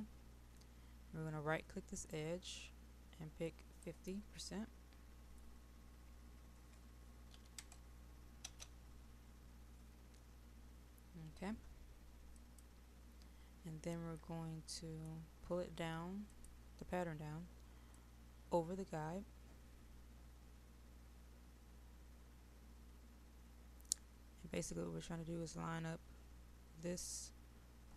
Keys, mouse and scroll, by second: 12.4 click, 13.9 middle click, 16.3-24.6 drag.